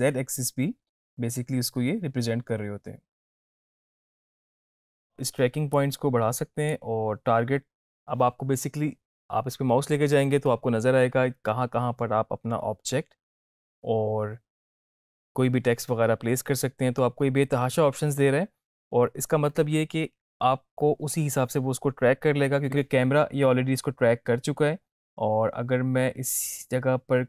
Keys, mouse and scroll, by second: 5.8-7.1 drag.